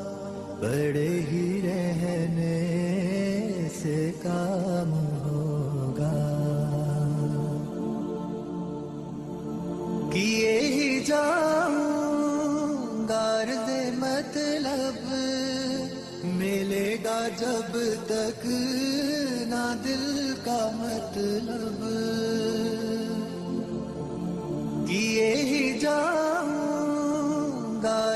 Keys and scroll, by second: 0.9 alt+c, 1.1 alt+w, 1.4 p, 7.8 shift+Page_Up, 11.5 alt+c, 11.7 alt+w, 12.1 p, 17.9 ctrl+Page_Down, 20.7 shift+Page_Up, 23.3 shift+Page_Up, 25.7 shift+Page_Up, 26.7 Escape.